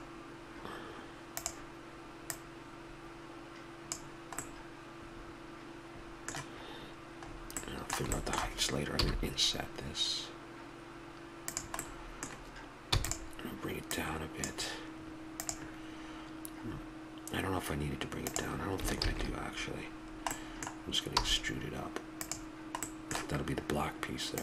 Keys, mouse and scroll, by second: 2.2-4.0 drag, 4.4-8.2 middle drag, 9.0 i, 12.0 middle click, 12.8 e, 13.7-15.5 middle drag, 18.9 ctrl+z, 19.9-22.1 middle drag, 21.1 e, 22.8-24.4 middle drag.